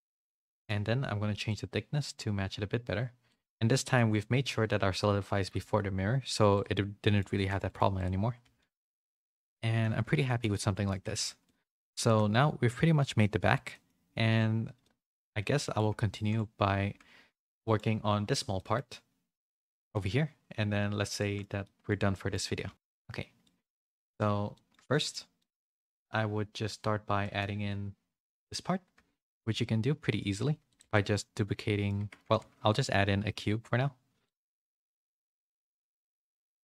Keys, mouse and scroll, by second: 0.4 middle click, 0.6 middle click, 1.4-3.2 shift+drag, 3.8 a, 3.9 middle click, 6.5 click, 7.0 middle click, 7.3 shift+middle click, 7.6 right click, 8.3 a, 8.6-9.8 middle drag, 8.6 a, 10.1 shift+a, 10.2 shift+middle click, 10.5 middle click, 11.0 a, 11.2 a, 11.4 middle click, 11.9 shift+middle click, 13.7 middle click, 14.8 middle click, 16.1 shift+middle click, 17.6 middle click, 18.5 middle click, 19.6 shift+middle click, 21.1 shift+middle click, 21.6 middle click, 22.1 shift+middle click, 22.6 a, 22.7 middle click, 23.4 middle click, 24.5 middle click, 24.9 shift+middle click, 25.3 middle click, 27.1 middle click, 29.1 shift+middle click, 29.5 middle click, 30.7 click, 30.8 Tab, 31.0 middle click, 32.2 Tab, 32.3 shift+a, 34.7-36.6 typing.